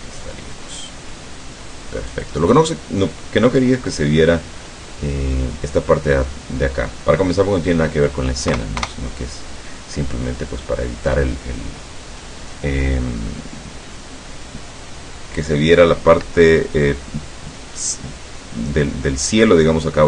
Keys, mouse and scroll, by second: 2.2 click, 4.7-5.6 middle drag, 8.9 KP_0.